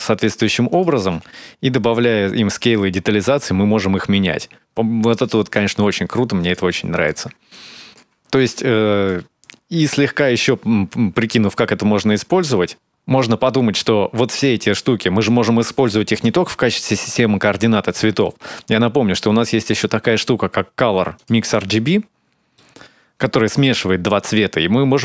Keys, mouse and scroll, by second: 0.3 ctrl+shift+click, 1.8 click, 5.7-6.5 scroll down 3, 6.2 click, 6.5 x, 6.7 click, 7.3 alt+click, 8.3 click, 10.7 scroll up 1, 11.0 scroll down 1, 11.4 middle click, 18.0 middle click, 18.7-19.0 scroll down 2, 19.0 shift+a, 21.8-22.3 scroll up 3, 22.3 middle click.